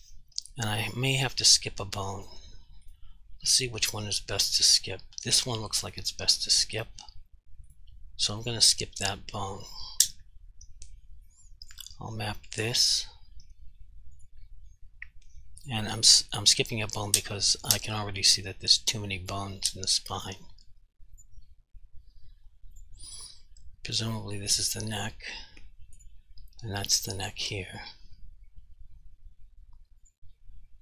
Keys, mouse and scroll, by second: 1.3 click, 2.9 right click, 3.6 click, 5.9 right click, 6.5 click, 7.7 right click, 8.5 click, 11.7 click, 20.2 click, 24.3 r, 25.0 right click, 26.0 click, 30.1 click.